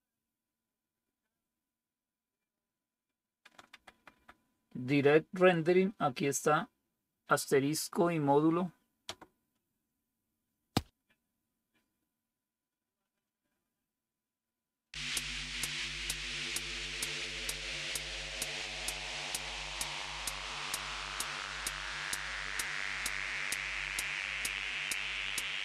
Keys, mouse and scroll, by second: 3.7 Down, 3.9 Down, 4.0 Down, 9.0 Return.